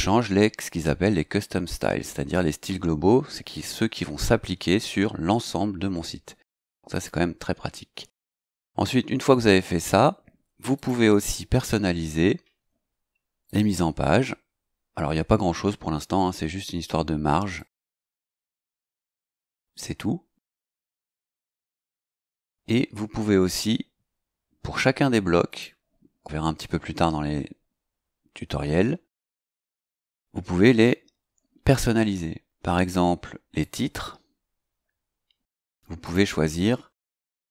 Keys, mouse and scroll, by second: 6.9 click, 10.7 click, 13.4 click, 17.6 click, 18.6 click, 21.6 click, 25.5 click, 33.6 click, 36.0 click.